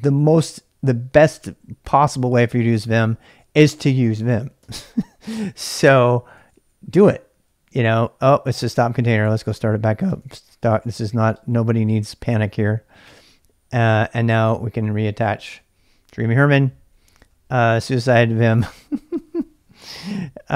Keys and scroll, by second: 4.1 ctrl+[, 4.3-7.0 typing, 8.6-15.3 typing, 15.5 Return, 16.8-17.6 typing.